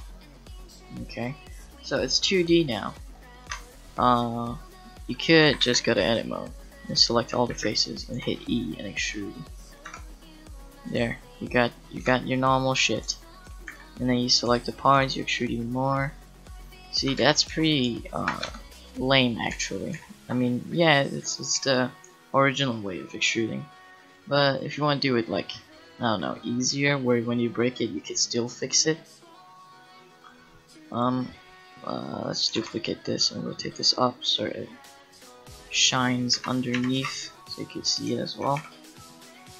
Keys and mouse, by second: 3.5 Tab, 5.4 a, 5.6 a, 7.3 a, 7.5 a, 8.2 e, 9.9 Tab, 12.0 Tab, 13.7 a, 15.0 e, 15.9 e, 16.9 click, 17.2 ctrl+z, 17.5 ctrl+z, 17.8 ctrl+z, 18.4 Tab, 19.5 ctrl+z, 20.4 ctrl+z, 21.6 KP_Decimal, 24.1-26.5 middle drag, 30.2-32.6 drag, 30.9-32.3 right drag, 32.3 middle click, 32.6 shift+d, 36.0-37.5 drag, 38.6 h.